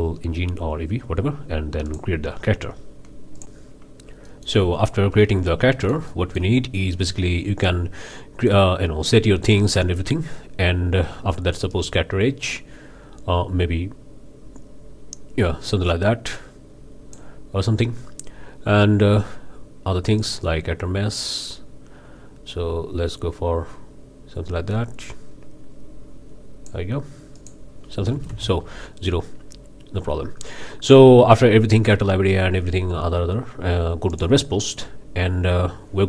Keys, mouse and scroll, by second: 1.9 click, 3.4 click, 4.3-4.7 drag, 4.7-5.7 scroll up 2, 5.8-6.6 shift+middle drag, 11.7-17.3 drag, 20.2-26.9 drag, 27.4 click, 28.1 KP_0, 28.3 KP_Enter, 29.3-34.1 middle drag, 34.1 drag.